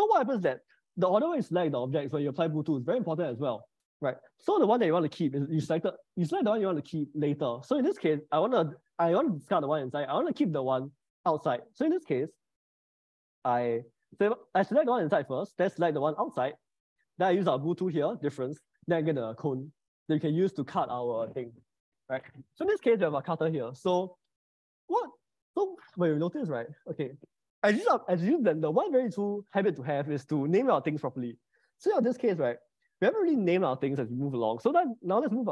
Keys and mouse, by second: 0.5 ctrl+z, 11.0 middle click, 12.9 ctrl+click, 17.5 ctrl+shift+b, 32.3 click.